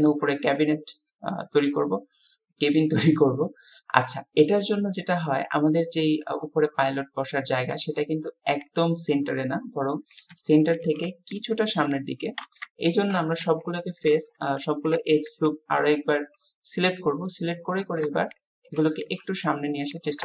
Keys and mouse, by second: 0.6 click, 1.9 click, 7.7 click, 8.7 click, 13.5 KP_1, 14.3 KP_3, 19.0 click, 19.9 click.